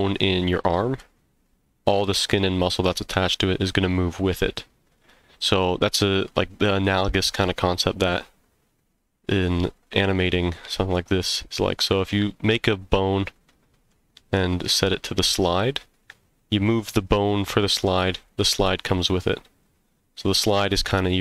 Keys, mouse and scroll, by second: 10.9-11.8 middle drag, 13.5-13.9 middle drag.